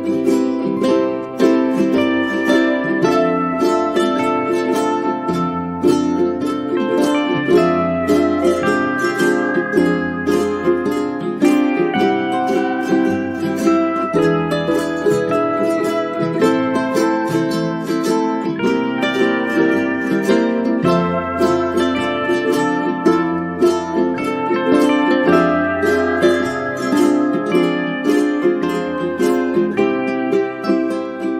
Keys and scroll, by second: 10.0 space, 17.2 space.